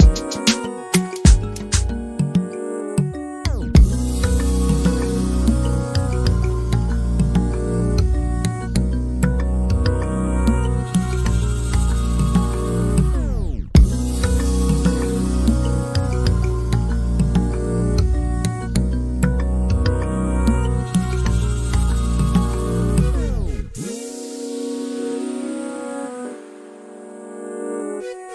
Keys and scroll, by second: 0.0-1.1 typing, 3.7-4.4 typing, 6.6-8.4 typing, 14.5-15.3 typing, 19.7 k, 20.8 t, 22.7-24.0 typing, 25.0 k, 26.4 m.